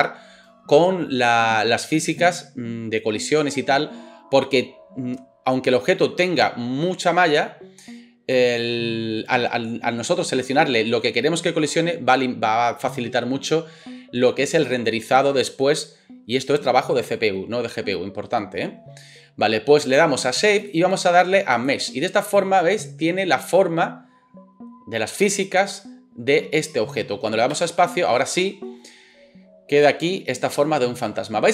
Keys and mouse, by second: 27.5 space.